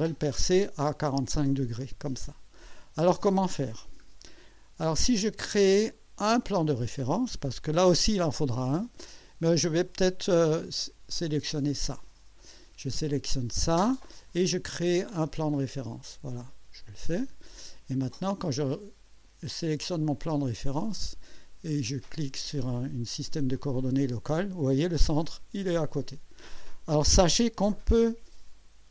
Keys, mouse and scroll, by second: 3.9 scroll down 1, 4.3 right click, 5.8 right click, 6.4-7.6 drag, 11.2 click, 15.5 click, 17.2 click, 18.5 click, 20.8 click, 23.6 click, 25.2-27.0 drag.